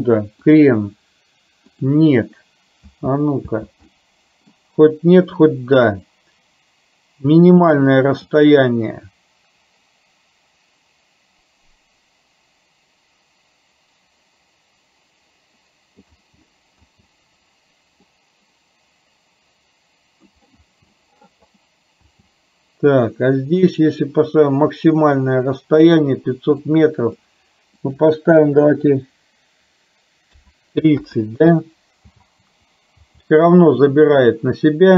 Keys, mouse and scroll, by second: 0.6-2.1 drag, 2.9 space, 3.6 space, 4.0 middle click, 8.4-16.1 drag, 16.3 space, 17.0 space, 18.3-20.3 drag, 20.8 space, 22.1 space, 26.9 click, 27.9-31.6 drag, 32.2 space, 33.2 space, 34.4-34.9 drag.